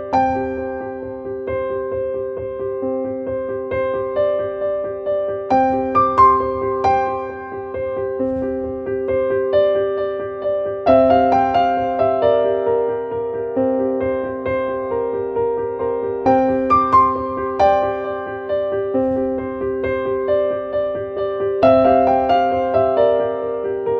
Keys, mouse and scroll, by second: 0.9-2.7 drag, 5.0 click, 6.0 click, 8.4 click, 9.7-13.3 drag, 19.7-21.4 drag, 23.1 click.